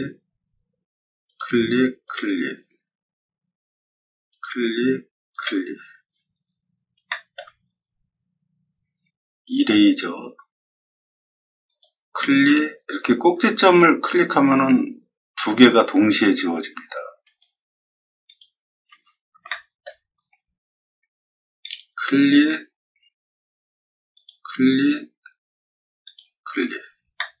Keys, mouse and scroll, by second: 1.2 click, 2.0 click, 4.3 click, 5.3 click, 6.3 middle click, 6.3 scroll up 2, 6.4 scroll down 2, 7.0 shift+middle click, 7.6 middle click, 7.6-9.0 scroll up 10, 11.6 click, 13.6 click, 17.2 click, 18.2 click, 18.9 scroll down 2, 19.4 shift+middle click, 20.1 scroll up 2, 20.1-21.1 middle drag, 21.6 click, 24.1 click, 26.0 click, 26.6 middle click, 27.1-27.4 shift+middle drag.